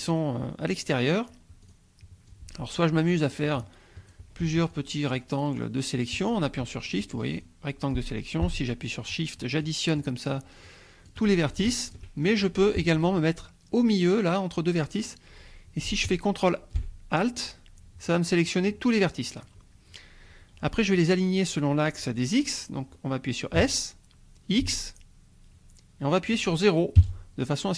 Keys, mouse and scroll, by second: 1.7 click, 2.3 click, 3.5 shift+click, 4.7 shift+click, 5.6 shift+click, 7.0 click, 7.4 click, 8.7-9.3 shift+drag, 9.6-10.2 shift+drag, 10.6-11.2 shift+drag, 11.7-12.1 shift+drag, 12.3 shift+click, 16.0 alt+shift+click, 23.5 s, 24.6 x, 27.0 KP_0.